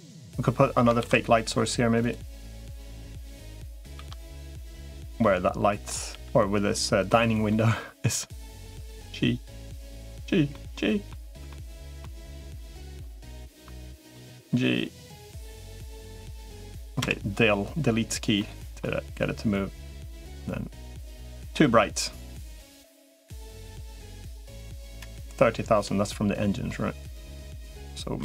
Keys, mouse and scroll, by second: 1.0 ctrl+s, 2.5 middle click, 4.0 shift+d, 5.1 middle click, 6.0 g, 7.3 middle click, 8.6 g, 10.4 middle click, 11.3-12.4 shift+middle drag, 12.5 shift+middle click, 13.1 middle click, 13.6 shift+middle click, 14.2 g, 15.3 middle click, 16.8 KP_Decimal, 18.2 middle click, 19.2-20.2 drag, 21.0 click, 23.4-25.8 drag, 27.0-28.2 drag.